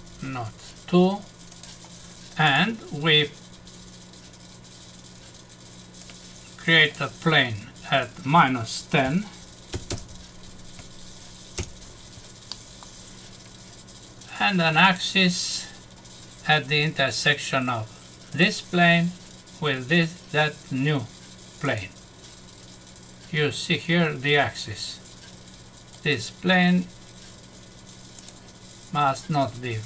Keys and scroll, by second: 11.5 Return, 12.5 F6.